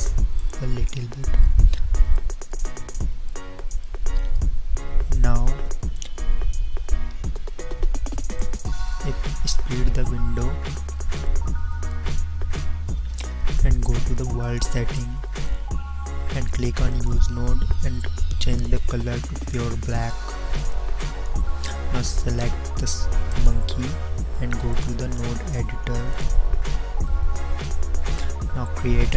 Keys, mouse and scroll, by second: 6.9 t, 8.3-10.2 drag, 10.9-14.1 middle drag.